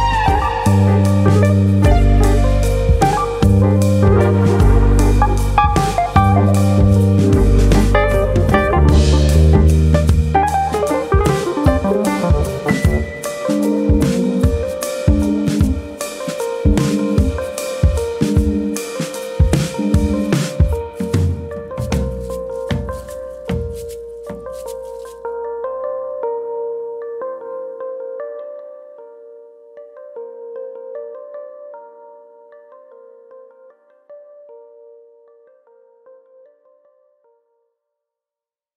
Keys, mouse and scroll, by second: 2.5 click, 3.4 middle click, 3.9 middle click, 4.9 click, 5.6 middle click, 6.5 click, 7.1 middle click, 7.7 middle click, 8.2 ctrl+z, 8.3 middle click, 8.7 Tab, 9.0 middle click, 9.7 shift+middle click, 10.0 shift+middle click, 10.4 click, 10.9 click, 11.6 Tab, 11.8 middle click, 12.3 Tab, 12.8 click, 12.9 middle click, 13.5 click, 14.2 Tab, 14.5 middle click, 15.0 middle click, 16.0 middle click, 16.0-16.3 scroll down 2, 16.3 middle click, 16.5 scroll up 4, 16.7 shift+middle click, 16.9 shift+middle click, 17.9 click, 19.9 shift+middle click, 20.2 middle click, 20.4 Tab, 21.2 click, 22.1 ctrl+click, 22.3 middle click, 22.6 middle click, 23.3 click, 26.0 middle click, 26.6 click, 26.9 shift+click, 27.4 click, 27.6 middle click, 27.9 shift+middle click, 28.7 click, 29.7 click, 29.9 middle click, 30.2 shift+middle click, 30.6-30.9 scroll up 1, 31.3 click, 31.3-31.9 scroll up 1, 31.9 click, 32.7 click, 33.2 click, 34.1 click, 34.4 middle click, 34.8 shift+middle click, 35.8 click, 36.3 click, 37.8 middle click, 38.2 shift+middle click, 38.5 middle click.